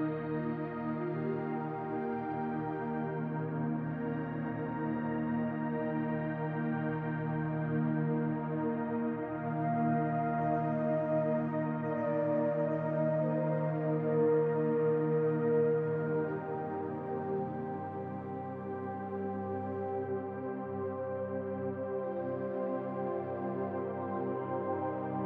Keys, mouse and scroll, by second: 1.4 Tab, 3.9-6.9 drag, 11.1-14.1 drag, 15.7-18.7 drag.